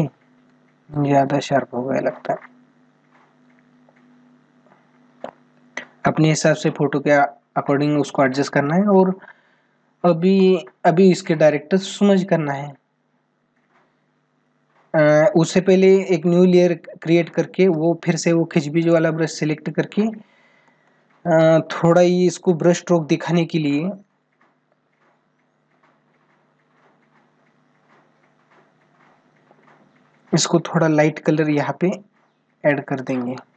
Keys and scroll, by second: 10.6 ctrl+-, 12.2 ctrl+-, 20.4 space, 22.2 ], 27.5 ], 32.9 ctrl+alt+z.